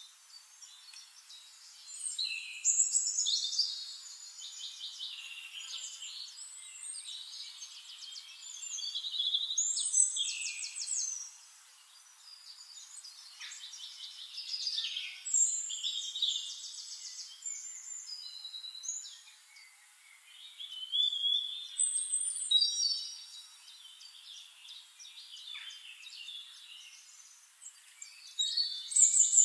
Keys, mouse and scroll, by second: 0.6 click, 1.3 click, 2.3 click, 4.0 click, 5.0 shift+click, 6.0 shift+click, 8.1 click, 9.9 click, 11.4 shift+-, 12.9 middle click, 13.0 click, 13.3 click, 13.4 middle click, 15.6 shift+click, 17.0 right click, 18.4 click, 20.0 click, 21.1-24.1 ctrl+drag, 24.8 middle click, 25.3 scroll up 1, 25.5 middle click, 25.9 middle click, 26.5-27.2 scroll up 2, 26.6 middle click, 27.2 ctrl+click, 29.2 shift+-.